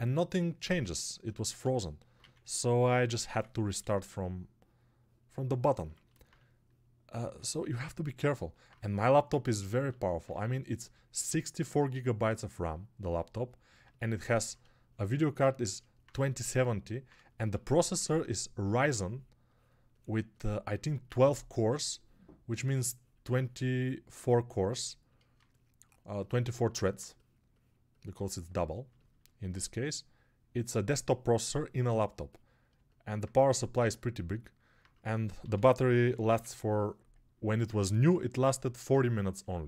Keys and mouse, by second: 2.1 1, 39.3-39.6 alt+drag.